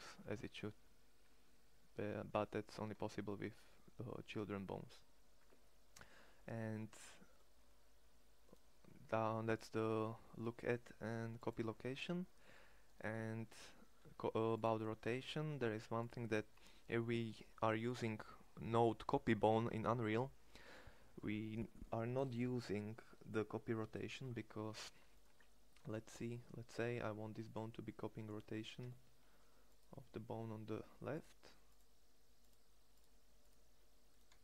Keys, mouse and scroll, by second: 9.1-11.6 drag, 11.6 middle click, 13.1 Tab, 13.6 x, 15.1 x, 28.4 Tab, 33.9 e.